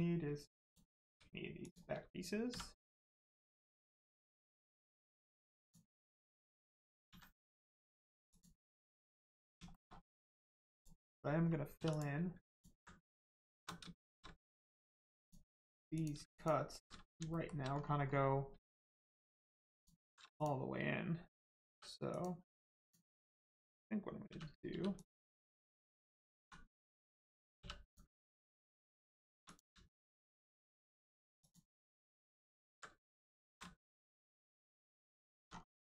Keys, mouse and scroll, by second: 0.6 shift+click, 1.5 shift+click, 5.5 click, 7.0 x, 8.3 click, 8.8 middle click, 9.6 shift+middle click, 9.9-10.3 scroll up 1, 10.7 click, 11.7 2, 11.8 click, 12.4 alt+click, 13.4 shift+click, 14.0 shift+middle click, 14.3 scroll up 1, 15.1 click, 16.3 alt+shift+click, 17.3 shift+middle click, 17.7 scroll up 1, 19.1 shift+click, 19.7 alt+shift+click, 20.3 alt+shift+click, 21.6 3, 22.0 click, 24.2 3, 24.7 2, 24.9 click, 25.4 alt+click, 26.3 click, 26.7 click, 28.8 alt+shift+click, 29.4 shift+click, 29.9 alt+click, 31.4 alt+click, 33.1 alt+shift+click, 33.8 shift+middle click, 33.9 middle click, 34.1 scroll down 1, 34.9 shift+middle click, 35.4 scroll down 1.